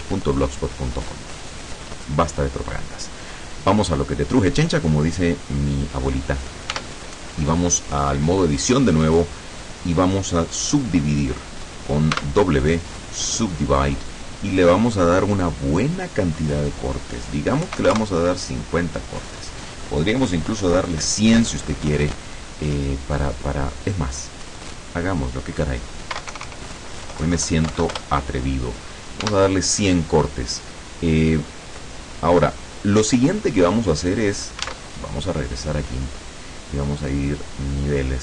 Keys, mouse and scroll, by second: 6.9 Tab, 12.3 w, 13.3 click, 14.6 click, 17.7 KP_5, 17.9 KP_0, 18.1 KP_Enter, 24.6 click, 26.3 KP_4, 26.5 KP_0, 27.8 Delete, 28.0 Return, 29.3 Tab, 33.7 click, 34.7 alt+Tab, 36.7 click, 37.9 click.